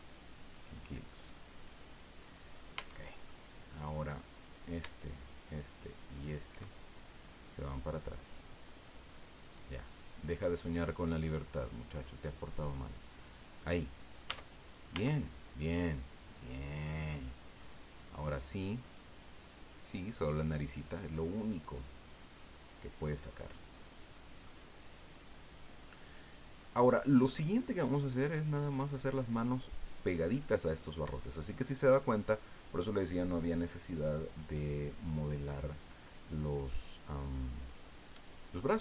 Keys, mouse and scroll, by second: 2.7 Tab, 3.3 click, 4.4 right click, 5.3 shift+right click, 6.1 shift+right click, 7.0-9.6 drag, 9.6-14.3 middle drag, 14.2 Tab, 14.9 Tab, 15.5 right click, 16.3 scroll down 2, 17.0-17.3 scroll up 2, 17.6-22.7 middle drag, 22.7 scroll up 2, 23.8-24.3 scroll down 4, 24.4-26.7 middle drag, 26.7-27.3 scroll up 2, 34.5 scroll up 2, 36.0 right click, 37.4-37.7 scroll down 2, 37.8-38.7 middle drag.